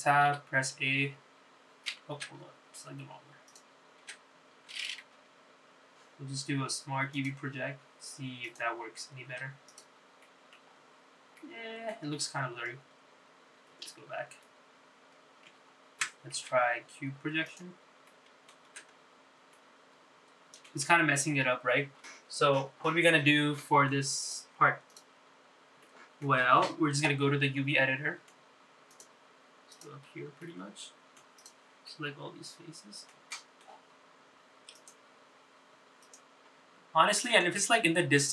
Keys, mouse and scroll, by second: 1.4 Tab, 2.5 a, 3.4 Tab, 4.0-4.5 scroll down 2, 4.6 click, 5.2 Tab, 6.3 u, 10.6 Tab, 10.8 click, 11.4 middle click, 11.8-12.5 scroll up 3, 12.5 middle click, 14.3 ctrl+z, 14.3-14.8 scroll down 2, 15.5 ctrl+z, 16.7 ctrl+z, 18.8 u, 19.2 middle click, 20.0 Tab, 20.7-21.8 middle drag, 22.5 ctrl+z, 23.7 ctrl+z, 24.5 middle click, 25.4 click, 26.0 click, 26.4 scroll up 2, 27.0 shift+middle click, 28.6 middle click, 30.0 shift+click, 30.9 shift+click, 31.6 middle click, 32.5 shift+click, 33.0-34.2 middle drag, 34.4 shift+middle click, 36.2 click, 37.4 click.